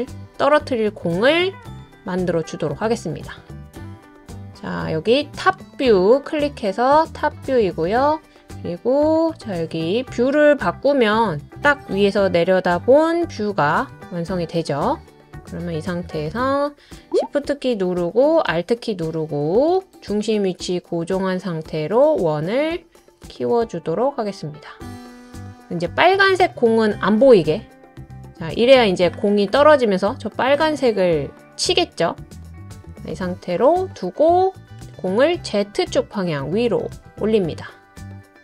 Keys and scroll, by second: 12.6 Down, 12.9 Down, 13.2 Down, 13.4 Left, 13.7 Left.